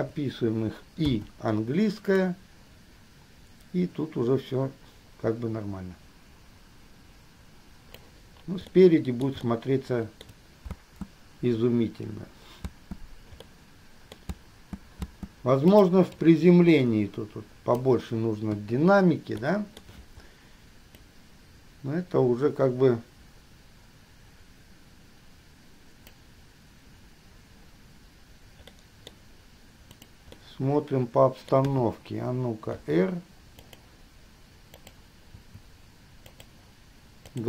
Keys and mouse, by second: 0.0 shift+click, 2.4-8.3 drag, 8.9-9.4 middle drag, 9.5-10.5 shift+middle drag, 10.9 space, 13.5-16.2 middle drag, 13.5 space, 16.0 space, 16.4-18.0 middle drag, 18.7 KP_3, 19.5-20.0 shift+middle drag, 28.9-30.3 drag, 30.4-31.8 drag, 31.8 KP_3, 33.0 r, 35.0 click, 35.5 r.